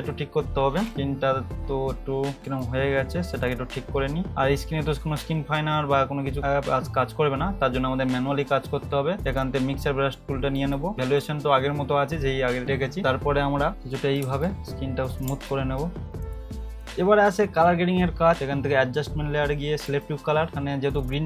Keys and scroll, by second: 2.4 [, 10.9 [, 13.7 [, 14.2 ], 16.2 [, 16.6 ], 16.7 ], 16.8 [.